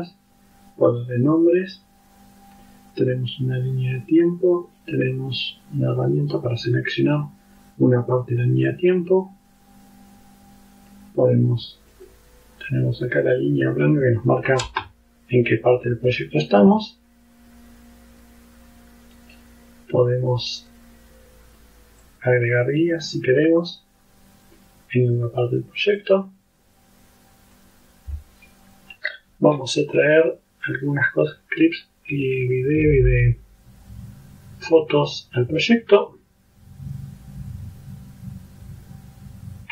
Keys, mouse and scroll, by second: 4.2 click, 6.4 click, 8.7-11.2 drag, 12.0 click, 13.3 click, 14.8 space, 16.0 space, 17.3 space, 19.2 right click, 20.7 click, 22.1 click, 23.7 click, 26.1-27.8 drag, 30.7-32.0 drag.